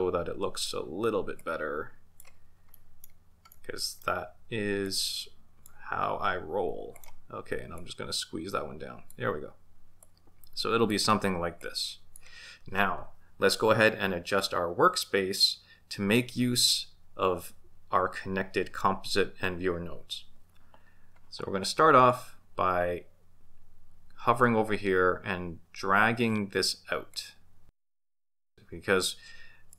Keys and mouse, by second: 0.1-0.7 drag, 1.4-2.2 drag, 2.7-3.1 middle drag, 3.6-4.1 middle drag, 4.8 click, 5.1 click, 6.9 click, 7.8-9.2 drag, 10.0-11.0 drag, 11.6 click, 27.2-29.7 drag.